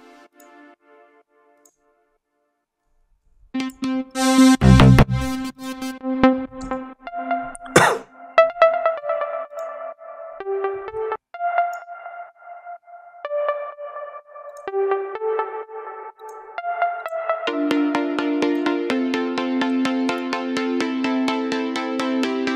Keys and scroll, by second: 3.3 q, 6.6 ctrl+v, 6.9 space, 11.0 space.